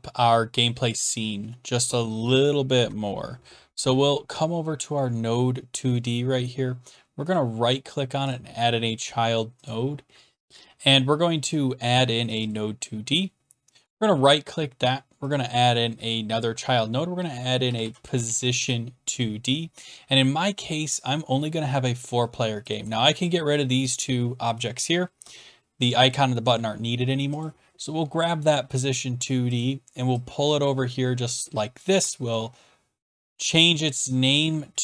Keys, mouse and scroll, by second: 10.5 click, 10.5 BackSpace, 12.4 click, 12.5 click, 13.8 right click, 15.3 click, 17.4-18.9 typing, 22.7 click, 23.2 ctrl+click, 23.7 typing, 25.2 Delete, 26.4 Return, 27.4 click, 29.6 click, 31.8 click, 33.5 click, 34.1 click.